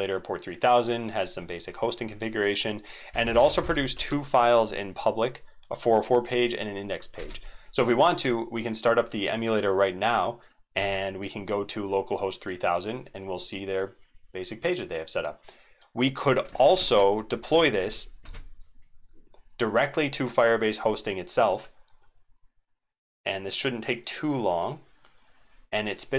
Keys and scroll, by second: 7.1 ctrl+v, 10.7 super+1, 16.5 ctrl+c, 16.7 alt+Caps_Lock, 16.8 alt+super+x, 17.5 ctrl+c, 17.8 ctrl+c, 18.2 ctrl+v.